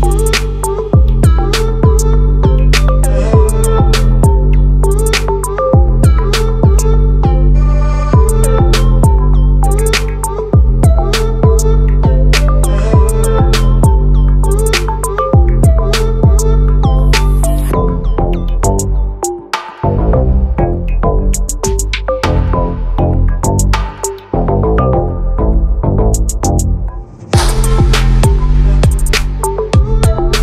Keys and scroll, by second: 7.9 ctrl+t.